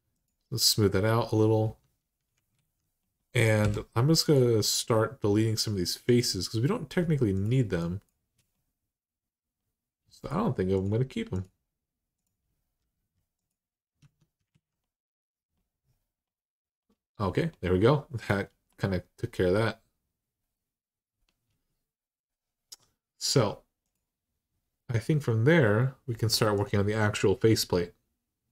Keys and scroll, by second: 1.4 Tab, 2.3 alt+z, 3.4 3, 12.7 x, 13.8 Tab, 14.3 alt+z.